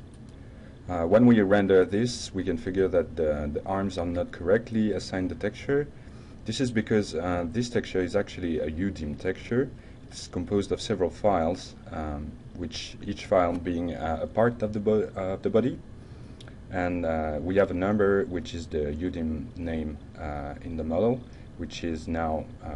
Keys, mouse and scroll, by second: 9.4 ctrl+alt+Tab, 20.7 ctrl+click, 22.2-22.7 ctrl+drag.